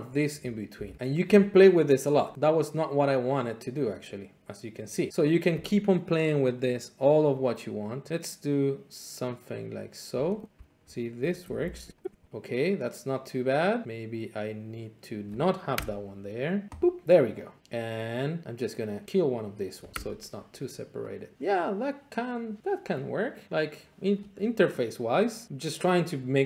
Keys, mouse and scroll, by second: 0.2 click, 0.7 ctrl+c, 1.2 click, 7.0 click, 10.0 click, 10.6 ctrl+c, 10.7 click, 10.8 click, 11.3 Return, 11.6 ctrl+v, 11.9 click, 12.1 BackSpace, 12.2 click, 15.2 click, 15.8 BackSpace, 16.8 click, 19.7 click, 21.6 click.